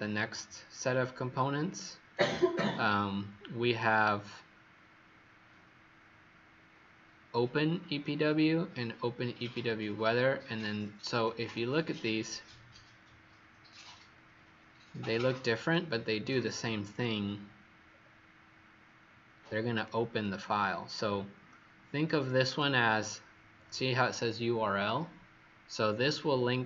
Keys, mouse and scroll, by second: 1.7 click, 17.8 scroll down 2, 18.9 scroll up 2, 19.7 click, 22.4 click.